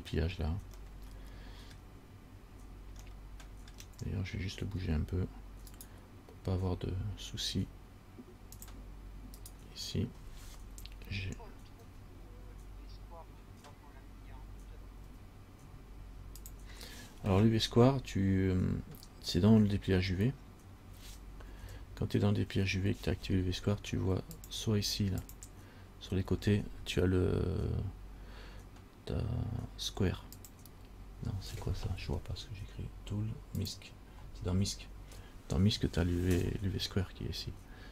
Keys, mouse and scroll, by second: 1.1 middle click, 3.3 middle click, 5.9 right click, 8.8 click, 9.6 right click, 12.1 g, 21.8 a, 22.5 a, 24.6 click, 25.4 click, 30.6 click, 33.8 click.